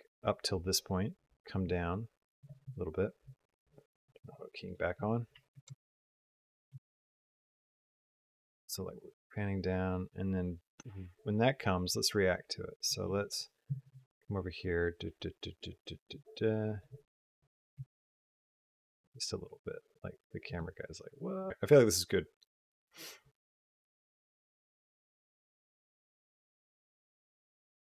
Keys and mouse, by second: 4.5 click, 5.1 r, 7.3-12.7 drag, 14.5-16.7 drag, 17.6 r.